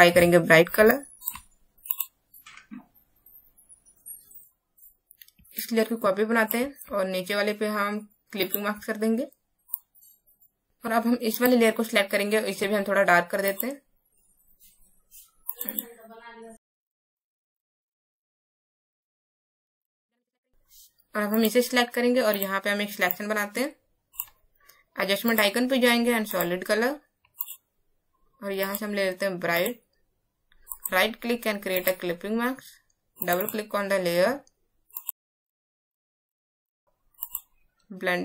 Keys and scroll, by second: 4.4 space.